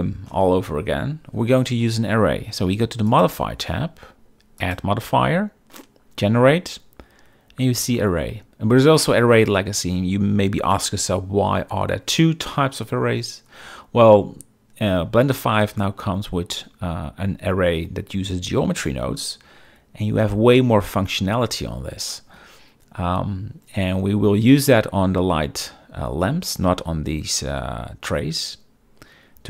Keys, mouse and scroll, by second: 3.2 click, 4.7-29.4 drag.